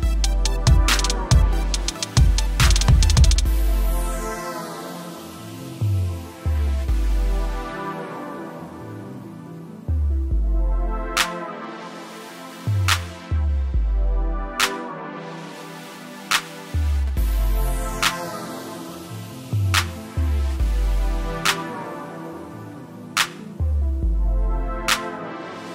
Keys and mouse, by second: 12.5 ctrl+=, 15.7 click, 20.4 click, 20.6 right click, 21.8 click, 24.0 click.